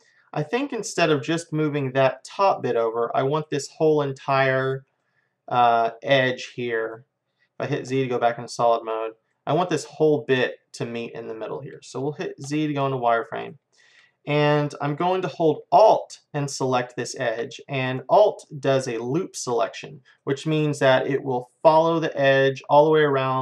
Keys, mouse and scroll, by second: 3.1-7.7 middle drag, 7.8 z, 8.3 middle click, 8.5 middle click, 8.7 middle click, 9.4 middle click, 12.5 z, 13.0-15.0 middle drag, 16.5-18.3 drag, 18.7-21.8 middle drag.